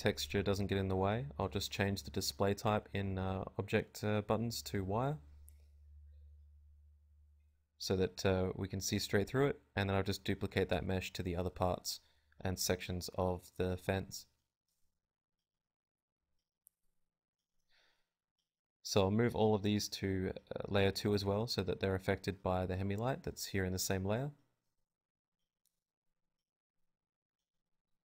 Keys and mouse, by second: 0.5 KP_7, 0.7 z, 1.2 shift+d, 1.5 click, 1.9 g, 2.2 click, 2.7 Tab, 3.1 b, 3.4 click, 3.7 Tab, 4.2-6.4 typing, 4.6 click, 7.1 click, 7.4-9.2 typing, 8.7 click, 9.7-14.6 drag, 11.4 g, 12.5 z, 13.8 m, 19.2-20.5 right drag, 20.5 m, 22.7 a, 23.8 KP_0, 26.9 Escape.